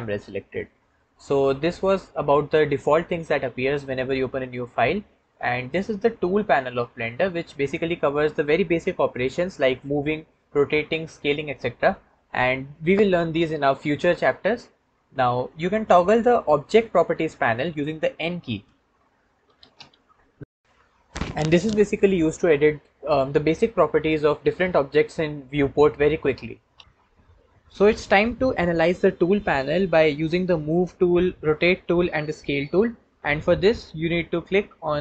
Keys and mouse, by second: 18.5 n, 19.3 n, 19.6 n.